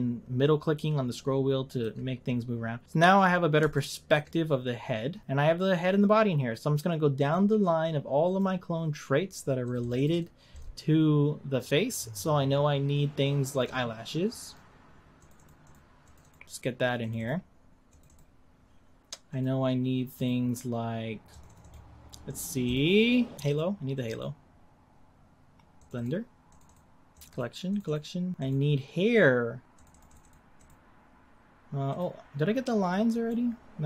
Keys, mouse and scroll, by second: 3.4-3.7 scroll up 2, 3.7-6.2 shift+middle drag, 7.1-10.3 drag, 19.3-22.3 drag, 28.4-30.1 drag.